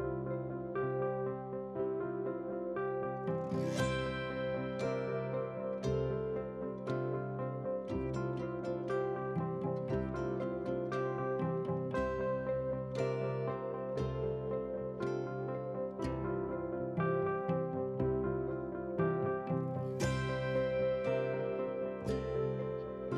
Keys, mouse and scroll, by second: 0.0 click, 0.2 click, 0.4 scroll up 1, 0.7 scroll down 2, 0.8 middle drag, 1.2 scroll down 1, 1.5 middle drag, 1.8 middle drag, 2.2 middle drag, 2.6-3.0 scroll up 2, 3.0 scroll down 1, 3.3 middle click, 4.4-4.8 drag, 5.1 scroll down 1, 5.2 middle drag, 5.8 ctrl+j, 6.2 click, 6.4 click, 6.6 middle drag, 7.3 KP_7, 7.9 r, 9.0-9.7 scroll down 2, 10.5-12.6 drag, 13.0 g, 14.7 g, 15.6 scroll up 3, 15.7 shift+middle click, 16.2 s, 17.3 s, 18.3 scroll up 4, 18.5 shift+middle drag, 18.8 scroll down 1, 19.1 middle click, 19.5 drag, 20.2 click, 20.8 shift+click, 21.0 shift+click, 21.6 shift+click.